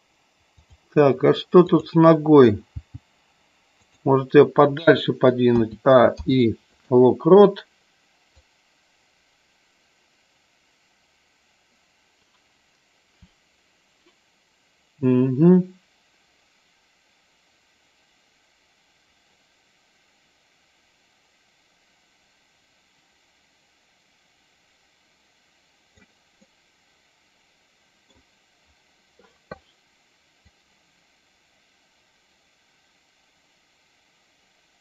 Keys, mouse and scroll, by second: 0.5 click, 1.6 click, 2.6 g, 3.7 click, 5.5 a, 6.1 i, 8.3-26.0 drag, 26.4-28.0 middle drag, 30.4-34.8 drag.